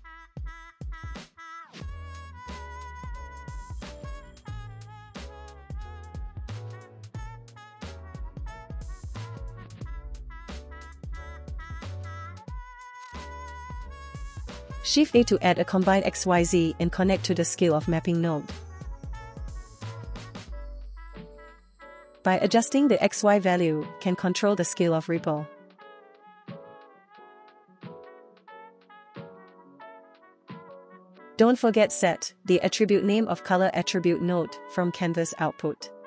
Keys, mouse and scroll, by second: 2.5 click, 4.7-6.0 shift+drag, 6.0 space, 6.1 space, 6.2 shift+click, 6.8 space, 6.8 middle click, 7.7 click, 7.9 middle click, 7.9 space, 8.1 space, 8.3 middle click, 9.3 middle click, 9.9-10.6 drag, 10.8 middle click, 11.5 middle click, 11.9 middle click, 12.3 middle click, 13.0 middle click, 13.8 middle click, 15.7-19.6 drag, 20.1 click, 20.2 shift+a, 21.9 click, 22.4 click, 22.8 click, 23.6 middle click, 24.0-24.4 scroll down 2, 24.4 middle click, 26.9 middle click, 27.2-28.0 scroll up 4, 27.5 middle click, 28.0 shift+click, 29.0 ctrl+z, 29.3 middle click, 29.5 scroll down 1, 29.7 middle click, 30.9-31.7 middle drag, 31.7 click, 33.5-34.4 drag.